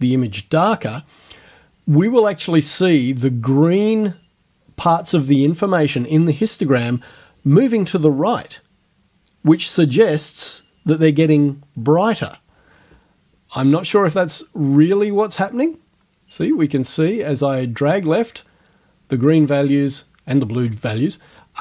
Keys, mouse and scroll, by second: 14.3-21.6 drag.